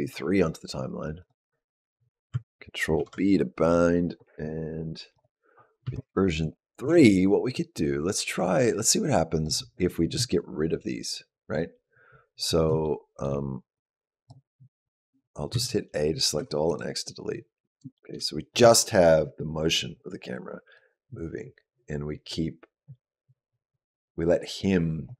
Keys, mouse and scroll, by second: 1.0 click, 2.8 ctrl+b, 5.0 click, 5.6 space, 6.7 space, 7.4 click, 12.6 shift+middle click, 13.6 click, 15.3 a, 16.2 x, 17.8 shift+middle click, 20.6 click.